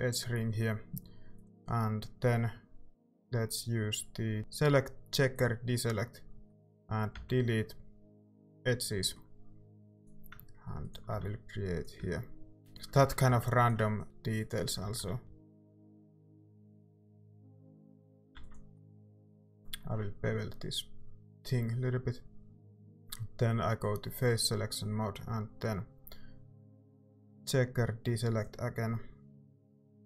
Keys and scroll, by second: 7.3 x, 9.8 a, 11.1-13.3 typing, 13.0 ctrl+z, 14.8-16.4 typing, 16.8 Tab, 17.4 a, 18.4 ctrl+s, 19.0 typing, 19.1 Tab, 19.1 ctrl+r, 19.8 ctrl+b.